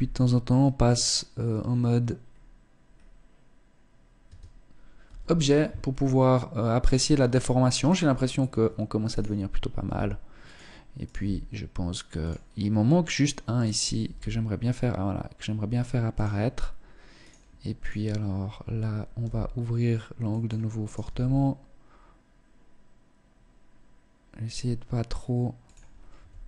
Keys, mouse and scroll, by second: 0.4-1.2 scroll up 3, 1.7 scroll down 2, 2.4-2.8 scroll down 1, 3.9 Tab, 4.3 z, 5.1 scroll up 2, 7.3 right click, 7.7-8.6 scroll down 2, 8.6 right click, 9.3 g, 10.5 right click, 10.7 g, 12.5 right click, 13.5 g, 15.8 click, 16.7 right click, 17.3 right click, 18.6 g, 20.3 right click, 20.5 g, 24.7 click, 25.7 s.